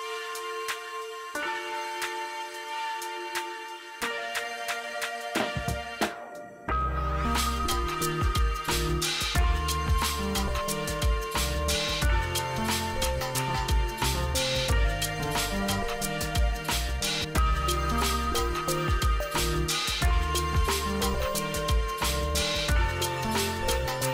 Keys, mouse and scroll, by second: 0.9 right click, 1.8 ctrl+r, 2.5 scroll down 1, 2.9 ctrl+r, 3.5 scroll down 1, 4.5 click, 5.0 F2, 5.3-8.1 drag, 11.9 ctrl+z, 13.3-20.3 drag, 20.3 ctrl+right click, 21.5 click.